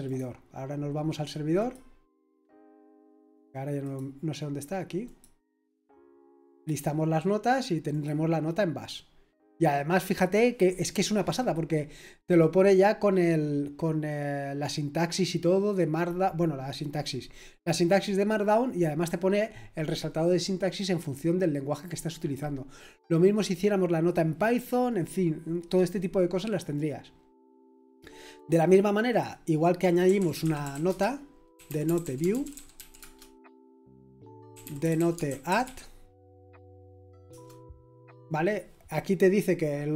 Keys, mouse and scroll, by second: 0.0 click, 1.6 click, 2.7 click, 3.8 click, 5.0 click, 6.5 click, 7.9 click, 28.3 click, 29.1 click, 29.8-36.1 typing, 37.3 typing.